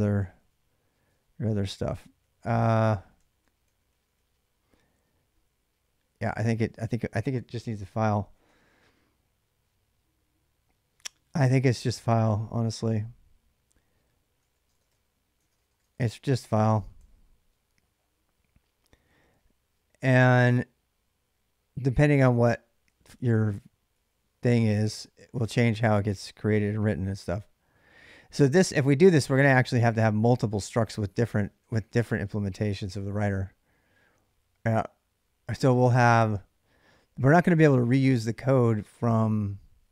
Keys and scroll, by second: 0.2 j, 2.0-4.0 typing, 7.3 p, 13.9-17.3 typing, 16.2 ctrl+[, 20.2-24.9 typing, 28.4-28.8 typing, 30.9-32.7 typing, 38.7 j, 38.9 j.